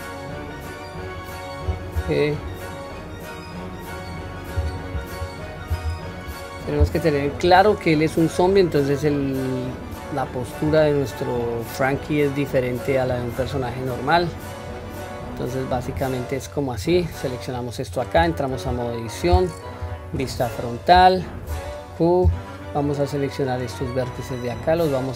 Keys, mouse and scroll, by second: 4.6 Tab, 5.1-5.9 scroll down 1, 5.9 q, 6.3-6.9 middle drag, 7.5-8.7 middle drag, 9.0-10.0 middle drag, 10.3 scroll up 1, 11.0-11.5 scroll down 1, 11.5-12.9 middle drag, 11.5-11.9 scroll down 1, 13.1 scroll down 1, 13.4 click, 14.0-15.7 middle drag, 16.0-16.4 scroll up 3, 16.8 click, 17.4-17.8 middle drag, 18.2 Tab, 18.8-19.2 shift+middle drag, 19.8 KP_1, 20.2-21.2 scroll up 2, 21.5 q, 22.7-23.8 drag, 24.7-25.1 drag.